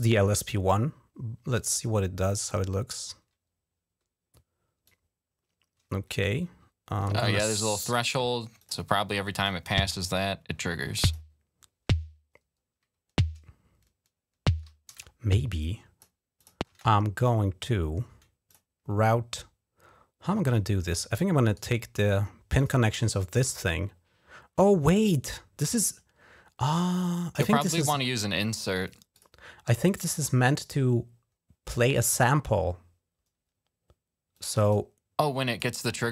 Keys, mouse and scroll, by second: 1.3 click, 4.6-5.9 drag, 7.4 click, 8.4 click, 9.2 click, 9.5 space, 10.3 click, 14.7 space, 15.4 click, 16.1 click, 16.5 space, 18.3 click, 20.2 click, 21.2 right click, 22.3 click, 28.9 click, 34.1 click, 34.4 click, 35.3 click.